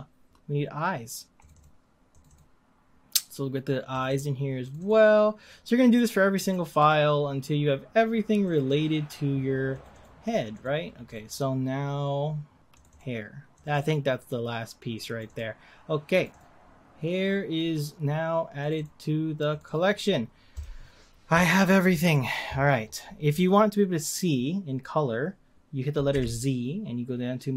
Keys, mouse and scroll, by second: 6.3-9.9 drag, 20.5 click, 26.1 z.